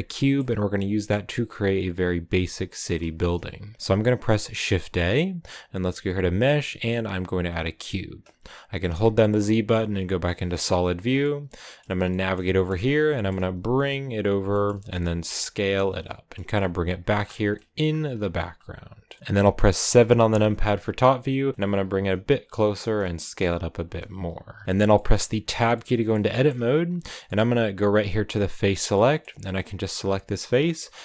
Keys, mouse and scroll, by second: 7.6 middle click, 10.3 z, 10.8 scroll down 2, 11.1 middle click, 11.9 scroll down 1, 12.0 middle click, 12.7-13.0 scroll down 3, 13.0 shift+middle click, 13.3 g, 14.4 shift+middle click, 14.9 s, 16.2 middle click, 16.5 g, 17.0-17.4 scroll down 7, 17.4 middle click, 17.8 scroll up 2, 18.0 g, 19.0-20.0 middle drag, 20.0 KP_7, 20.7-21.4 scroll up 3, 21.5 shift+middle click, 21.7 g, 22.5 s, 23.5 g, 24.5 click, 24.6 middle click, 25.3 Tab, 25.6 middle click, 26.4-26.9 scroll up 4, 26.9-28.5 shift+middle drag, 28.5 click, 28.8 middle click, 29.5 right click, 30.4 scroll down 2, 30.6-31.0 middle drag.